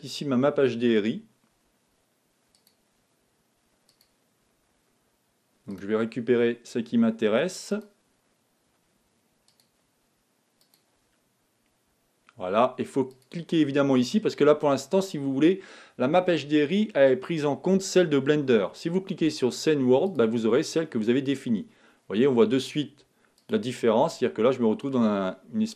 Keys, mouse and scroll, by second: 4.4-11.1 drag, 20.5 click, 23.3 scroll down 2, 23.4 click, 24.2-25.7 middle drag.